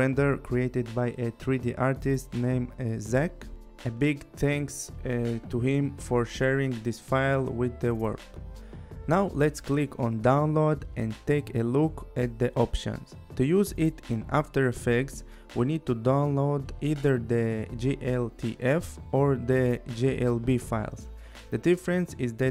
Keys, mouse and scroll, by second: 2.7 click, 4.8 click, 8.1 click, 10.0 click.